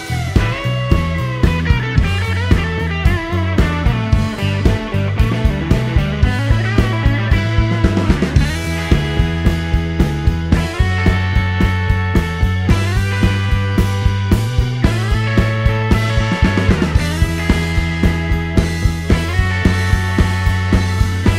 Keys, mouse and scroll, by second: 1.1 click, 2.8 click, 5.7 shift+o, 7.6 click, 9.1 shift+click, 9.6 shift+o, 10.2-10.8 shift+middle drag, 10.8-11.1 shift+scroll down 1, 11.1 middle click, 12.1-12.4 scroll up 1, 13.9 click, 15.5 shift+click, 15.9 shift+o, 19.0 click, 20.1 shift+click, 20.5 shift+o, 20.9 shift+scroll down 1, 21.0-21.3 shift+middle drag.